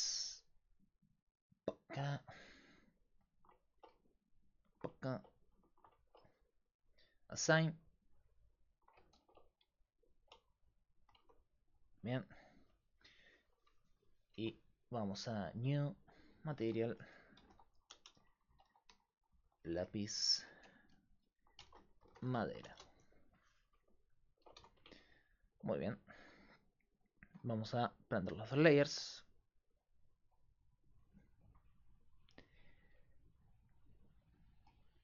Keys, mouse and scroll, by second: 0.0-35.0 typing, 2.0-3.3 drag, 2.7 right click, 3.3-6.4 middle drag, 6.9-8.6 drag, 8.6 middle click, 9.2 ctrl+r, 11.2 Tab, 12.0 Tab, 14.4 Tab, 15.1-18.1 drag.